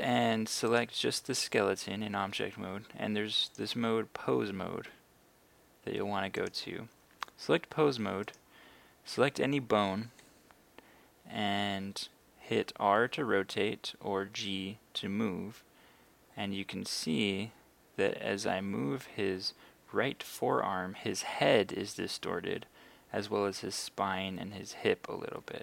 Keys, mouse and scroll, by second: 0.7 right click, 1.4 right click, 3.5-7.5 drag, 8.3 right click, 13.0 r.